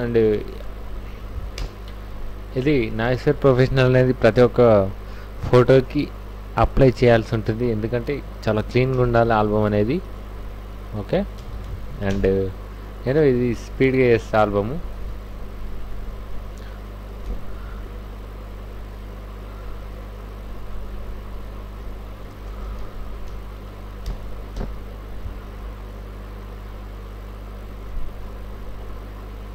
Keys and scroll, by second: 1.6 Return, 8.8 ctrl+a, 9.0 ctrl+c, 9.2 ctrl+w, 11.1 w, 11.5 v, 11.7 v, 12.1 Tab, 13.7 Right, 17.3 alt+Tab, 22.1 alt+i, 22.2-23.3 typing, 22.5 Return, 24.0 Return, 24.5 f.